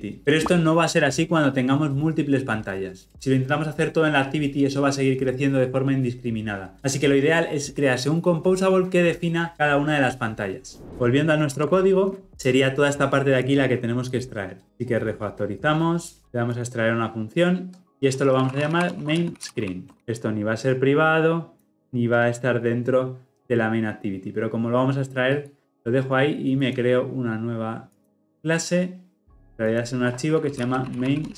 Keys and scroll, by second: 16.6 ctrl+alt+m, 19.9 ctrl+alt+o.